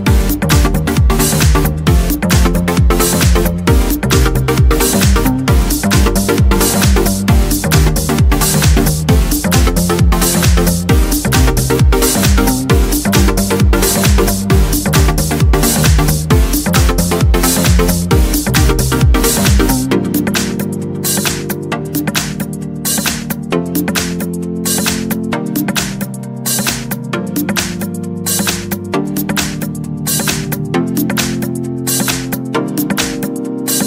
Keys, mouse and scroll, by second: 0.2 click, 0.8-2.8 drag, 2.0 scroll down 1, 2.5 scroll up 1, 8.0 click, 10.7 click, 11.7 click, 12.7-13.0 scroll down 1, 13.0-13.4 scroll up 2, 13.4 scroll down 2, 13.5 scroll up 2, 16.2 click, 17.8 click, 19.0 click, 19.8-20.3 scroll up 2, 20.3-20.8 scroll down 2, 20.8 scroll up 2, 20.8 scroll down 2, 21.1-21.4 scroll up 2, 21.4 scroll down 2, 21.7-22.2 scroll up 2, 23.4-23.8 scroll down 2, 23.8-25.0 scroll up 2, 25.0 click, 26.2 click, 28.9 scroll down 2, 29.4 scroll down 2, 30.6 scroll up 2, 31.5 Escape, 32.5 click, 33.4 click.